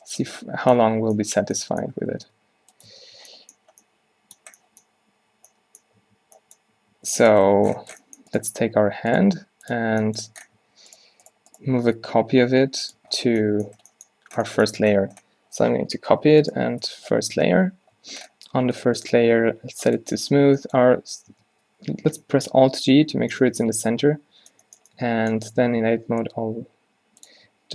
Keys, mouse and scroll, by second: 1.0 Tab, 2.1 Tab, 2.3 Tab, 2.5 g, 3.0 Tab, 5.5 2, 6.1 1, 6.8 3, 8.6 Tab, 9.4 g, 9.8 Tab, 10.7 Tab, 11.8 g, 13.1 Tab, 16.2 shift+d, 16.9 m, 18.1 1, 20.5 Tab, 21.4 Tab, 22.9 alt+g, 25.6 Tab, 25.8-27.7 typing.